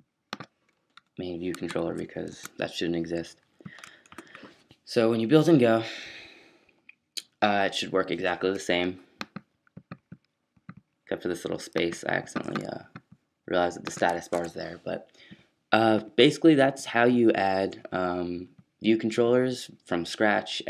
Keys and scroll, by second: 0.9 BackSpace, 1.6 super+BackSpace, 1.7 super+s, 2.3 super+q, 14.3 super+q.